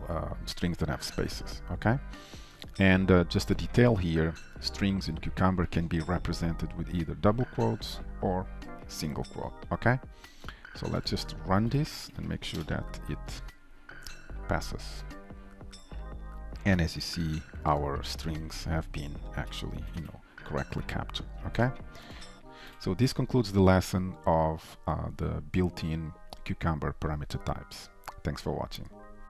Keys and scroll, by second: 11.8 alt+shift+F10, 18.8 Down, 19.8 Up, 22.7 ctrl+shift+F12.